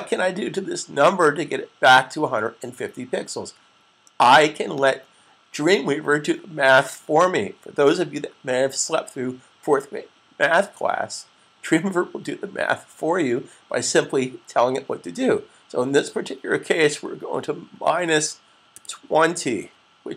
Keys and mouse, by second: 4.7 click, 17.6 typing.